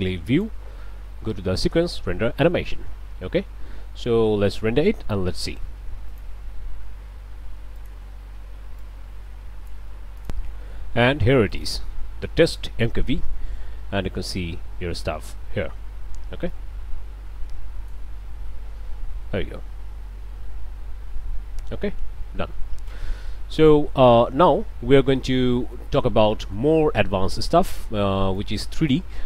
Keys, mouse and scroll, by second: 0.3 click, 6.1 click, 7.8 click, 8.9-9.9 drag, 10.3 click, 11.5 click, 16.5-18.1 drag, 25.7-27.9 drag, 28.4 click.